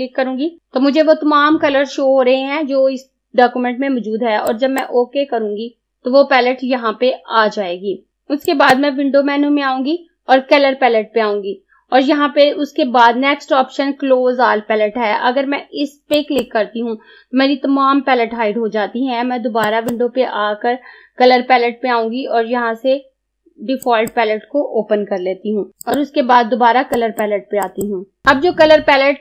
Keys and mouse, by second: 4.6 click, 8.6 click, 16.2 click, 19.8 click, 23.9 click, 25.8 click.